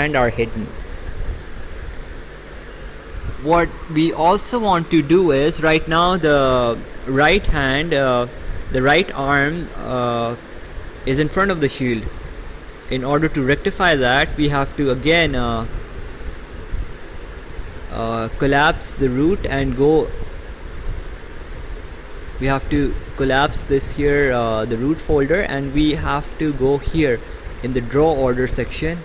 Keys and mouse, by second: 14.1 click, 15.7 click, 20.8 click, 23.0 click, 27.0 click.